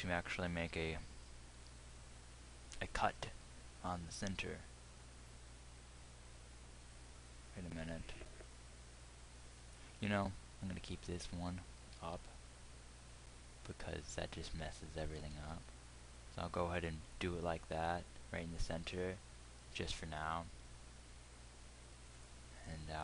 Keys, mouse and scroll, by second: 3.8 ctrl+r, 11.0-15.0 drag, 12.4 g, 17.3 ctrl+r, 22.7-23.0 drag.